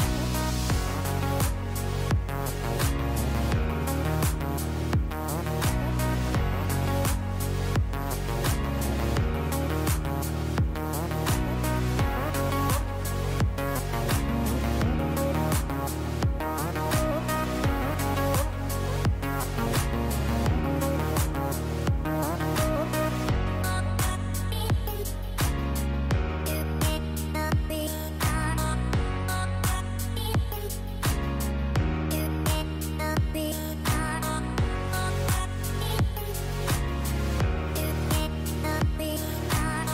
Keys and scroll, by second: 19.2 KP_0, 23.0 space, 25.4 space, 29.0 u, 34.4 space.